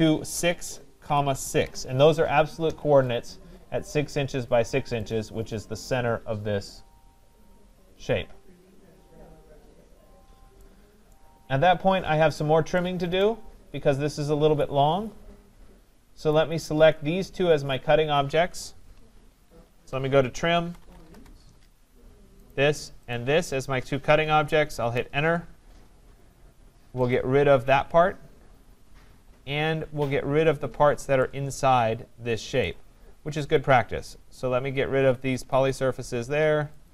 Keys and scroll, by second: 2.6 Return, 19.6 Escape, 21.1 Return.